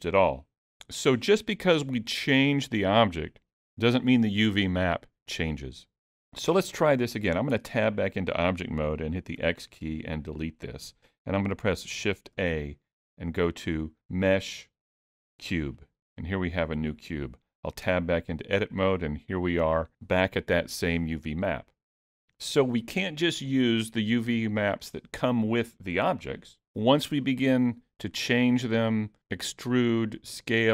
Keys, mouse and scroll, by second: 7.5 Tab, 9.4 x, 12.3 shift+a, 17.8 Tab.